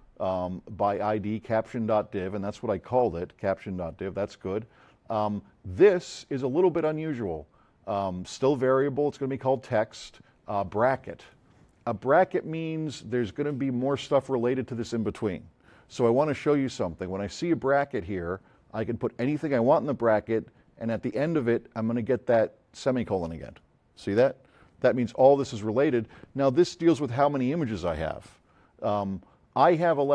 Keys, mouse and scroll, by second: 29.9 click.